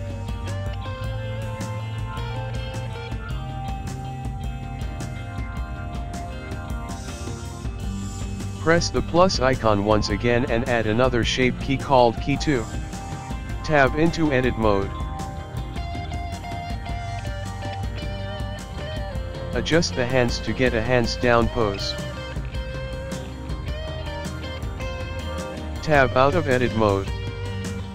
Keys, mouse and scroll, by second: 4.0 space, 4.4 click, 7.8 click, 10.1 click, 12.2 click, 13.6 click, 15.7 Tab, 16.4-18.7 scroll up 8, 21.0 r, 27.2 click.